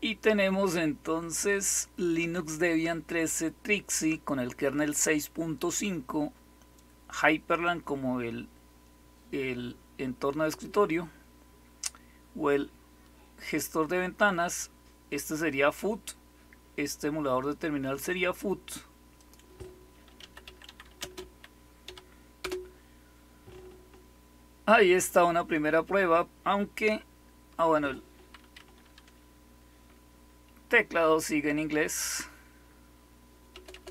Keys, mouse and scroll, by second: 19.1 click, 19.9-22.3 typing, 28.5 Up, 33.4 BackSpace, 33.6 BackSpace.